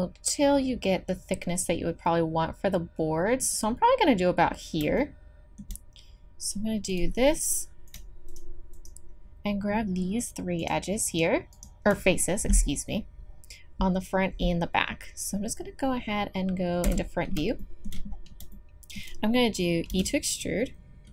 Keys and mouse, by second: 5.7-6.9 middle drag, 6.9 click, 10.3-16.8 drag, 16.8 KP_1, 18.1-20.2 drag, 19.9 e.